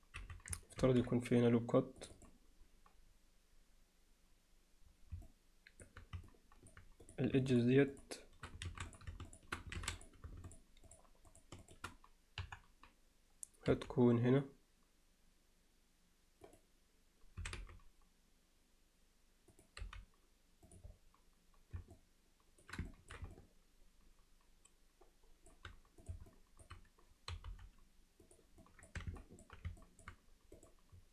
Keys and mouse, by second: 0.2 z, 0.8 ctrl+r, 5.3 alt+middle click, 6.3-6.7 middle drag, 7.1 click, 7.5 shift+click, 8.0 shift+click, 8.7 alt+a, 8.9 click, 9.3 shift+click, 9.8 alt+a, 10.0 click, 10.5 shift+click, 11.3 shift+drag, 11.6 shift+click, 12.4 KP_1, 13.7 g, 19.8 g, 22.0 middle click, 22.9 ctrl+alt+middle click, 23.4-25.5 alt+middle drag, 26.3 alt+middle click, 27.3 g, 28.7 click, 29.2 middle click, 29.8 alt+middle click, 30.6 click.